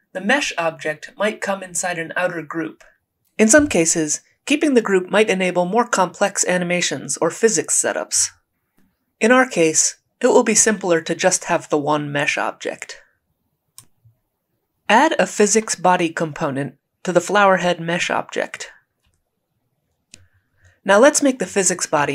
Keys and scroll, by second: 9.8 Delete, 14.5-15.6 typing.